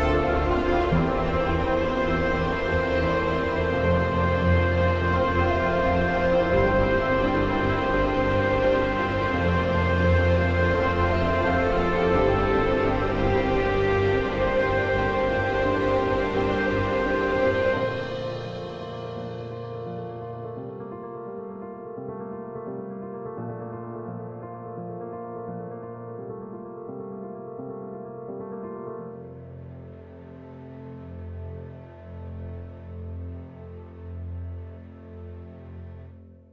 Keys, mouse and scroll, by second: 2.0 F4, 3.3 click, 3.8 right click, 4.7 F2, 4.9-13.1 drag, 14.0 click, 15.5 ctrl+z, 17.3 click, 18.2 End, 18.6 shift+Home, 18.9-20.6 typing, 22.1-26.0 drag, 26.0 ctrl+right click, 27.0 click, 27.8 End, 28.3 shift+Insert, 29.5 space, 30.1 click, 30.7 ctrl+right click, 32.9 F3, 33.1-36.5 drag.